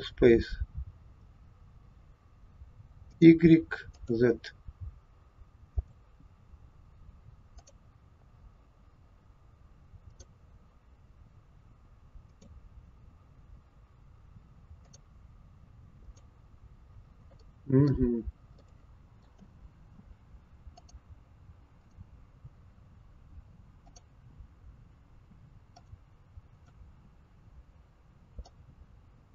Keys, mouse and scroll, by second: 3.1 click, 3.9 click, 5.8 click, 7.6 click, 10.2 click, 12.3 click, 14.8 click, 16.1 click, 17.3 middle click, 17.3-17.7 scroll down 1, 18.1-18.7 scroll up 2, 18.7 middle click, 20.8 click, 21.8 click, 24.0 click, 25.8 click, 26.6 click, 28.4 click.